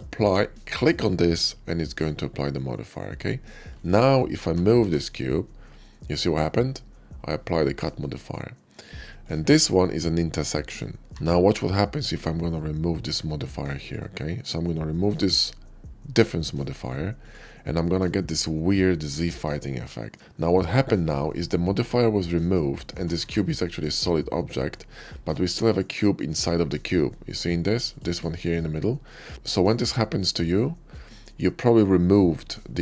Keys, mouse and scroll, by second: 0.6 click, 3.6 click, 4.5 g, 4.7 y, 8.0-9.0 right drag, 9.0 click, 11.0 g, 17.1 click, 17.8 middle click, 18.2-20.4 middle drag, 21.4-22.4 middle drag, 22.9 g, 23.1 y, 23.3 g, 25.4 right click, 27.2 click, 27.6 click, 28.0 click, 28.1 click, 28.4 click, 29.6-30.8 middle drag.